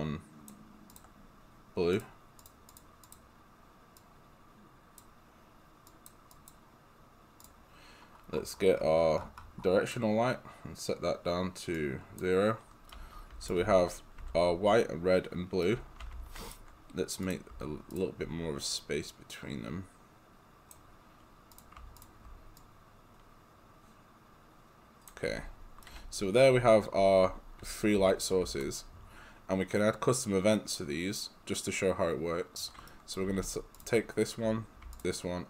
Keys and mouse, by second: 11.9 click, 12.9 right click, 13.6 g, 15.7 right click, 15.8 d, 17.3 click, 17.9 shift+click, 18.7 click, 22.0 shift+click, 22.6 click, 25.3-28.5 typing, 25.8 right click, 33.3 g, 33.8 click, 35.0 shift+click.